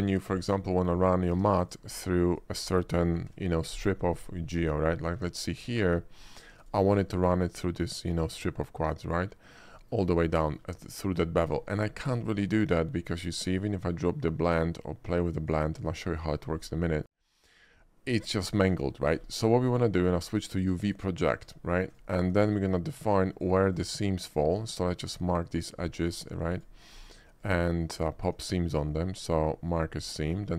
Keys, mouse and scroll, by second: 0.3 middle click, 0.3 scroll up 1, 0.6 middle click, 1.4 Tab, 1.7 click, 2.4 shift+click, 3.2 ctrl+b, 4.2 middle click, 4.2-4.9 scroll up 3, 4.5 middle click, 4.6 click, 4.9 middle click, 5.2 Tab, 5.7 Tab, 5.9 right click, 6.6 click, 7.2 middle click, 8.6 middle click, 9.3 middle click, 9.9 middle click, 10.2-10.7 shift+middle drag, 10.9 shift+middle click, 11.7 shift+middle click, 12.0 shift+middle click, 12.6 shift+middle click, 13.8-15.6 shift+drag, 16.7 middle click, 17.0 middle click, 17.3 scroll up 1, 17.6 shift+middle click, 18.7 shift+middle click, 19.0 shift+middle click, 19.3 shift+middle click, 19.4 shift+middle click, 20.9 shift+click, 21.5 Tab, 22.0 click, 22.5 ctrl+click, 23.0 ctrl+click, 23.4 ctrl+click, 23.8 ctrl+click, 24.4 ctrl+click, 24.9 ctrl+middle click, 25.6 ctrl+middle click, 26.3 ctrl+click, 26.6 ctrl+click, 27.0 ctrl+click, 27.5 ctrl+click, 28.1 ctrl+click, 28.5 ctrl+right click, 29.7 ctrl+click, 30.1 ctrl+middle click, 30.3 ctrl+middle click.